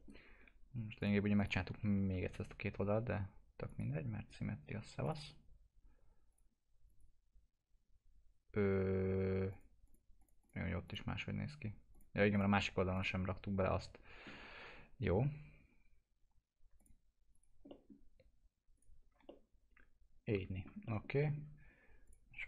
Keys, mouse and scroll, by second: 1.0 click, 1.6 s, 9.5 click, 16.8 click, 17.7 middle click, 18.0 scroll down 1, 18.7 click, 19.2-20.8 alt+middle drag, 22.0 click.